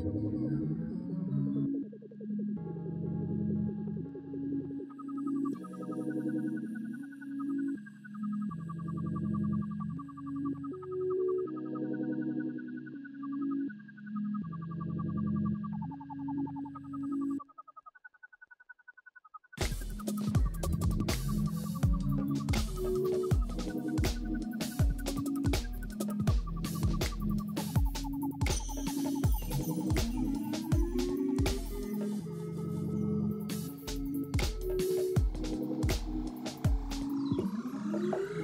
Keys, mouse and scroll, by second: 0.3 F4, 1.0 middle click, 11.5 double click, 22.0 double click, 32.4 right click, 36.0-36.9 typing.